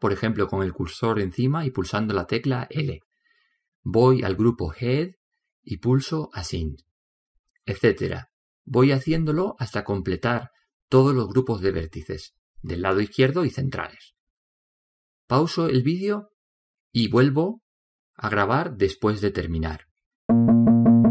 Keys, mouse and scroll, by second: 4.7 click, 6.1-9.6 drag, 14.3 a.